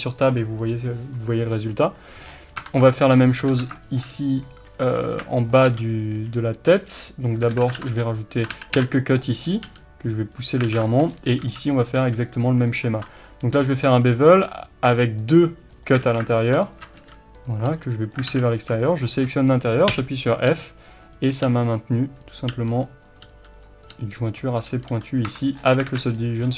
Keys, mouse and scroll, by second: 2.3-2.6 scroll down 1, 2.6 Tab, 2.9-7.3 shift+middle drag, 3.2-3.5 scroll up 1, 3.5 alt+a, 5.0 b, 5.1 scroll down 1, 6.1 b, 7.3 click, 7.6 alt+a, 7.8 ctrl+r, 8.1 click, 8.5 ctrl+z, 9.7 g, 10.5 click, 10.7 alt+a, 10.9-12.6 shift+middle drag, 11.1-11.7 scroll up 1, 11.7 b, 11.9 scroll up 1, 12.0 r, 12.6 click, 13.0 ctrl+b, 15.7 click, 16.1 alt+a, 16.4 alt+click, 17.4 b, 18.3 alt+a, 18.6 click, 19.1-20.3 shift+middle drag, 19.4-20.0 scroll up 1, 20.0 f, 20.3 click, 20.5 g, 21.4 click, 21.5 g, 22.5 click, 22.5 g, 22.9 click, 23.3 g, 25.3 Tab, 25.6-25.9 scroll down 1, 25.9 alt+a, 26.1-26.5 scroll down 1.